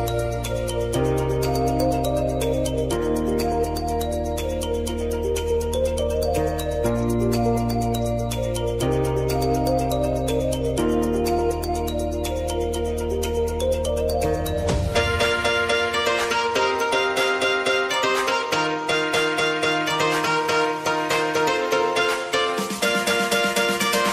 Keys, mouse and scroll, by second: 1.7 space, 3.7 space, 4.2 t, 5.5 click, 6.4 Return, 8.0 click, 9.9 space, 12.5 space, 14.5-17.6 drag, 17.6 space, 19.4 click, 20.1 space.